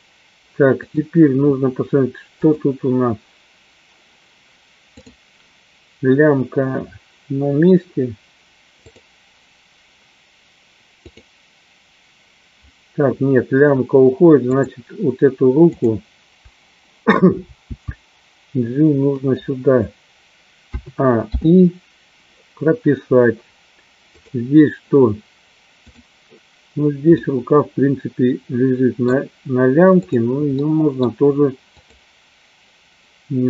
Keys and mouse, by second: 3.0 click, 5.2 click, 9.4 click, 11.6 click, 14.7 click, 16.0 click, 17.8 g, 19.5 click, 21.7 i, 24.8 click, 27.4-29.1 middle drag, 30.1 click, 30.7 middle click, 31.8-32.8 drag.